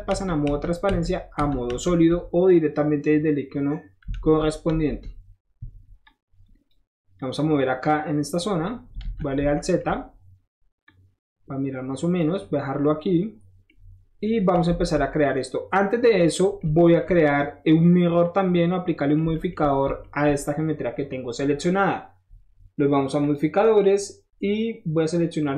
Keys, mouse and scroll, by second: 0.0-1.6 typing, 4.1 alt+z, 4.6 z, 6.0-6.7 drag, 7.1-8.3 drag, 9.0 alt+z, 9.9 middle click, 10.8-12.2 drag, 12.3 middle click, 12.6 middle click, 12.7 middle click, 14.7 alt+z, 15.7-19.7 middle drag, 20.0 shift+middle drag, 20.4 scroll up 1, 23.2 click, 25.4 click.